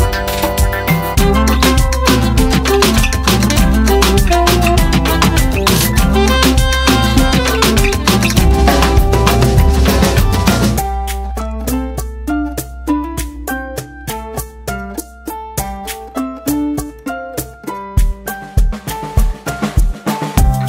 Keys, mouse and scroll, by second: 2.8 space, 3.8-4.2 alt+scroll up 1, 4.5 alt+scroll up 1, 5.0-5.9 drag, 14.1-17.2 drag.